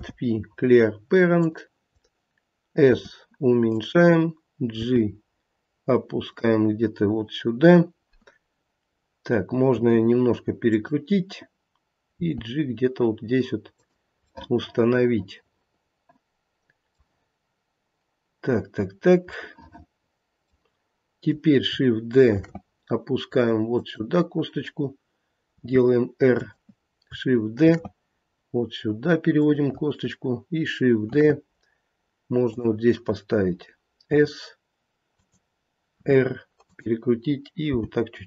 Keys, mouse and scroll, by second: 2.9 s, 4.8 g, 9.7 r, 12.1 g, 14.3 middle click, 14.5 middle click, 14.7 middle click, 15.0 middle click, 19.4 middle click, 19.7 middle click, 22.3 shift+d, 25.5 r, 27.6 shift+d, 31.1 shift+d, 34.1 s, 36.0 r, 37.6 g.